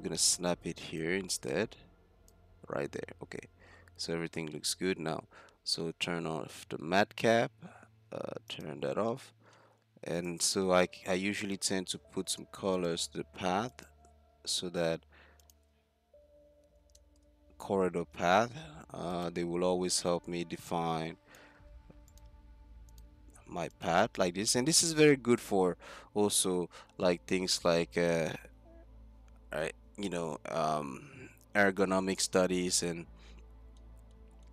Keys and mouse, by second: 2.5 Tab, 6.9-8.5 middle drag, 8.5-9.1 drag, 9.2-10.2 middle drag, 10.2 right click, 10.6-10.9 middle drag, 12.0 z, 13.4 click, 15.4-17.6 drag, 19.2-21.7 drag, 22.1-24.1 drag, 24.1 z, 24.4 middle click, 25.3 z, 26.4 ctrl+l, 28.6 z, 32.4-34.5 middle drag.